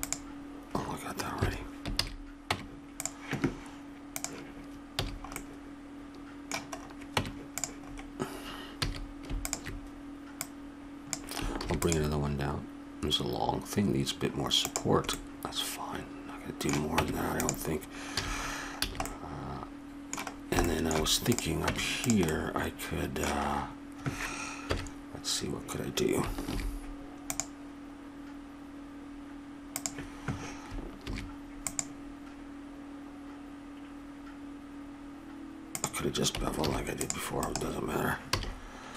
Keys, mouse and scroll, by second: 1.9 ctrl+z, 2.5 Tab, 4.1-5.3 drag, 5.0 a, 5.3 middle click, 7.1 Tab, 8.8 a, 9.4-10.5 drag, 11.1 click, 11.6 ctrl+r, 15.1-17.0 middle drag, 17.0 Tab, 18.2 a, 18.8 a, 19.3 middle click, 20.7 middle click, 21.3-22.3 drag, 21.6 Tab, 22.3 middle click, 24.6 KP_1, 26.4 ctrl+r, 31.1 ctrl+r, 36.6 ctrl+r, 38.3 a.